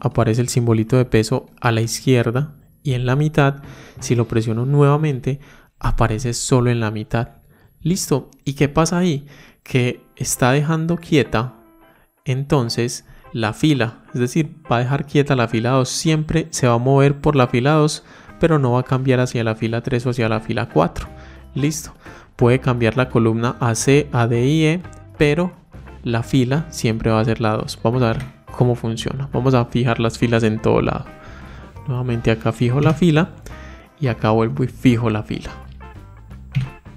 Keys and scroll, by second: 4.5 F4, 30.9 F4.